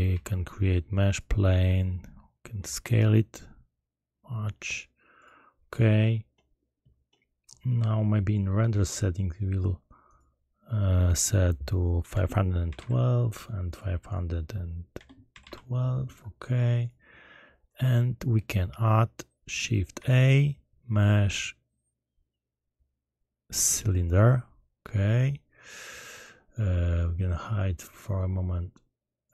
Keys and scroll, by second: 0.1 shift+a, 2.6 s, 12.6 1, 12.7 2, 14.9 5, 15.3 1, 15.4 2, 19.9 shift+a.